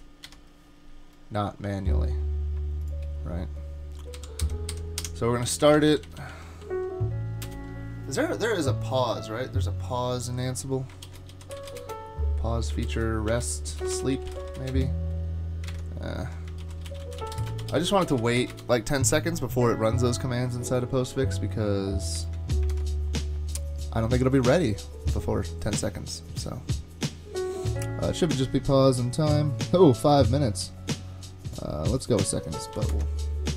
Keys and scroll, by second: 0.2 Up, 4.2 Delete, 4.4 Delete, 4.7 Delete, 5.0 Delete, 5.4 Page_Down, 5.6 Page_Down, 5.8 Page_Down, 5.9 Page_Down, 6.1 Page_Down, 6.2 Page_Down, 7.5 Return, 11.1 shift+super+f, 11.1-15.1 typing, 12.8 shift+super+f, 15.7 super+Tab, 16.6-18.9 typing, 22.7 ctrl+Tab, 32.7 super+c, 32.9 super+Tab.